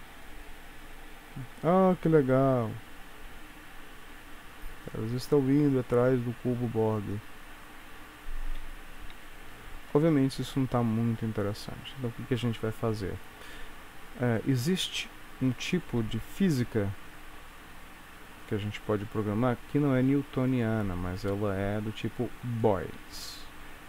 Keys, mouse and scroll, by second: 8.5 space, 10.0 ctrl+s, 10.7 middle click, 16.2-17.1 scroll down 4, 17.1-17.8 scroll down 2, 18.5 click, 18.5-20.3 scroll down 1, 20.6 click.